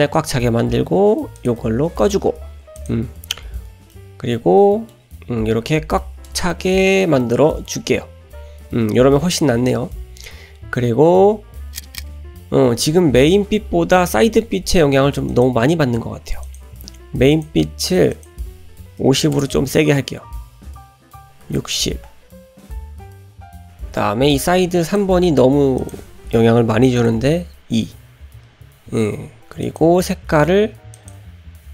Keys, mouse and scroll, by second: 1.4 click, 2.8 click, 3.9-5.0 middle drag, 3.9-4.6 scroll down 1, 6.0 shift+middle click, 6.5 ctrl+middle click, 7.2 shift+middle click, 15.3 click, 16.4 click, 17.3 click, 18.1-22.3 drag, 24.9 click, 25.8-28.0 drag, 29.6 click.